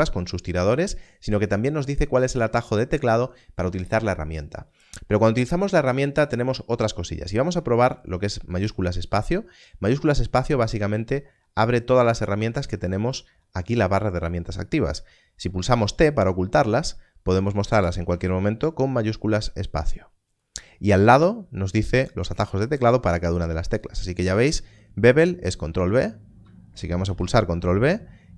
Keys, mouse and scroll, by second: 8.4 shift+space, 15.9 t, 17.6 shift+space, 27.0 ctrl+b.